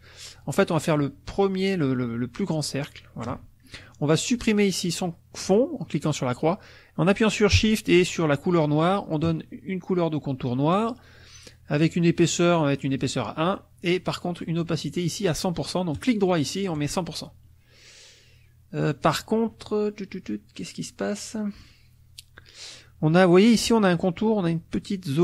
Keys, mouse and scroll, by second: 5.4 click, 8.4 shift+click, 11.8 right click, 12.9 click, 16.0 right click, 16.8 click.